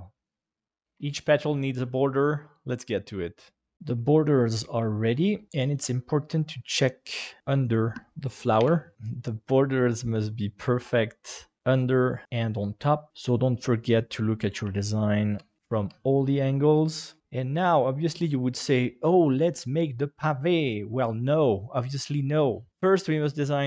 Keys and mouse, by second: 0.7 shift+middle click, 3.7 middle click, 5.0-5.3 shift+middle drag, 5.5-7.4 middle drag, 7.6 right click, 8.6 h, 9.1-10.4 middle drag, 10.8-12.2 middle drag, 12.2 KP_7, 14.1-14.5 shift+middle drag, 14.7-15.4 ctrl+middle drag, 15.6 ctrl+middle click.